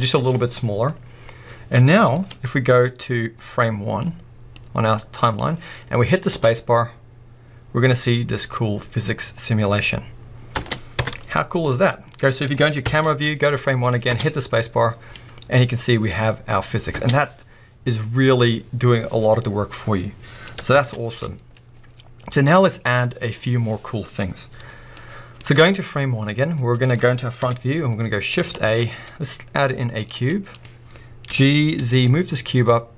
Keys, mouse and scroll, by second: 0.6-0.9 scroll down 1, 0.9-3.6 middle drag, 3.6-5.7 drag, 5.7 middle click, 6.1 scroll up 2, 6.3 space, 10.6 space, 11.0 KP_0, 11.7-12.8 scroll up 1, 12.8 scroll up 1, 12.8 shift+Left, 13.5-14.1 scroll up 2, 14.1 space, 15.4-17.0 scroll down 2, 17.0 space, 20.7 shift+Left, 24.9-27.4 middle drag, 27.4 KP_1, 27.5-32.9 middle drag, 28.0-30.0 scroll up 2, 30.0-31.3 scroll up 1, 31.3-32.9 scroll up 1.